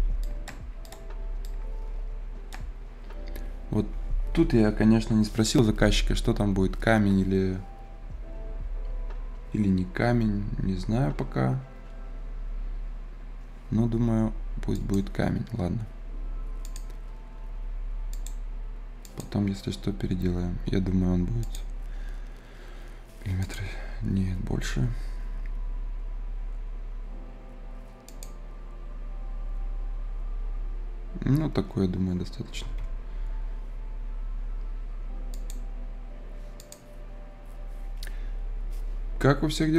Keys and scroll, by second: 32.2 Escape, 32.8 Escape.